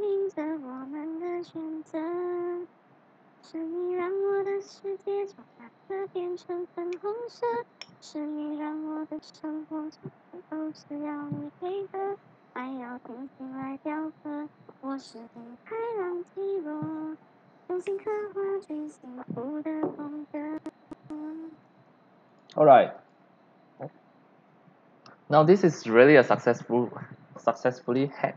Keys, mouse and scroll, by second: 4.4-5.9 drag, 22.3 click, 22.9 click, 25.4 click.